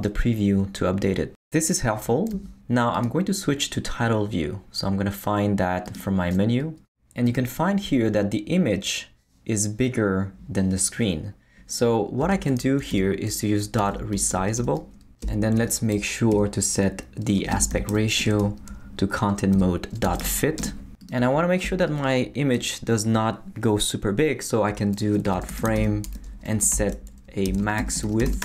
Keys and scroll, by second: 12.2 Return, 12.9-14.8 typing, 15.2 Return, 15.6 Tab, 16.3-20.7 typing, 21.6 Return, 21.9 Tab, 25.0-28.4 typing.